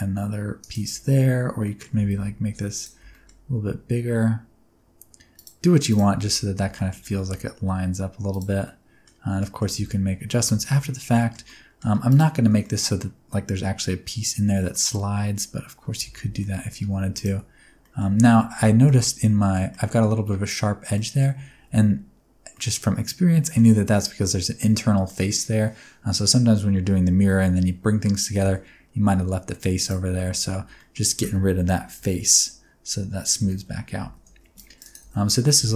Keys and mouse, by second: 0.5 click, 0.8 ctrl+z, 1.6 middle click, 1.8 s, 2.0 x, 2.7 click, 2.9 s, 5.3 click, 6.1 alt+z, 6.5 alt+z, 6.7 middle click, 7.0 g, 7.1 g, 8.2 click, 8.6 Tab, 8.6-9.0 middle drag, 9.3 middle drag, 9.7 alt+a, 9.8-10.2 middle drag, 10.5 shift+middle click, 11.1 shift+middle click, 11.4 middle drag, 12.5 middle drag, 14.6 middle drag, 15.9 Tab, 16.2 alt+z, 16.3 middle click, 16.9 3, 17.7 middle click, 18.1 alt+z, 18.5 Tab, 18.8-19.5 middle drag, 19.6 middle drag, 20.9 middle drag, 21.3 Tab, 21.6 alt+z, 22.4 middle click, 23.3 shift+middle click, 25.0 middle click, 28.3 x, 30.1 Tab, 30.3 middle click, 30.5 alt+z, 30.5 middle click, 31.9 KP_1, 32.0 KP_3, 32.9 KP_1, 33.3 alt+z, 33.6 Tab, 34.0 1, 34.2 alt+a, 34.3 c, 34.7 click, 34.9 alt+z, 35.2 g, 35.5 z.